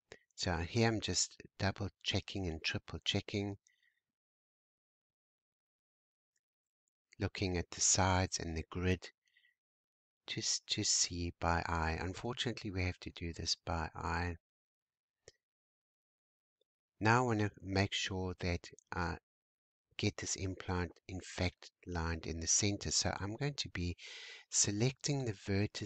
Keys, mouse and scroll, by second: 0.0-0.5 shift+scroll down 1, 0.5-0.9 scroll up 3, 2.2-2.5 scroll down 2, 9.2-9.6 scroll up 5, 9.6 shift+middle click, 10.3 scroll down 1, 11.3-12.1 scroll down 4, 13.2 Tab, 14.5-15.5 middle drag, 15.5-15.9 scroll down 2, 15.9-16.9 scroll up 4, 18.1 shift+middle click, 19.0 scroll down 1, 19.1 middle click, 19.9 Tab, 21.1 alt+a, 21.7-24.0 middle drag, 24.0 c.